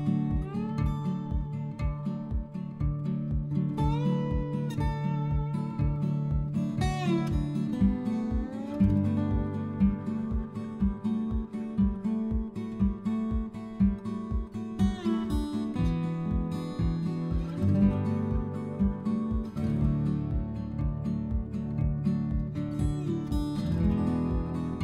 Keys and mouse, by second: 1.0 click, 2.5 click, 4.3 click, 5.1 middle click, 7.4 Tab, 7.9 a, 9.5 Tab, 10.4 Tab, 10.9 click, 13.2 click, 15.2 click, 18.9 middle click, 20.0 click, 23.8 click, 24.4 Tab.